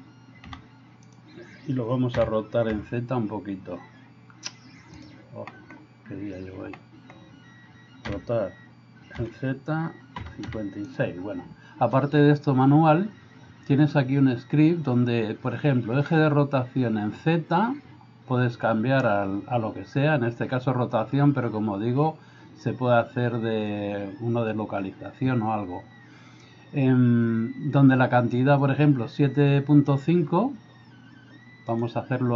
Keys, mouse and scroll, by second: 0.5 g, 2.3 r, 2.7 z, 6.8 middle click, 8.1 r.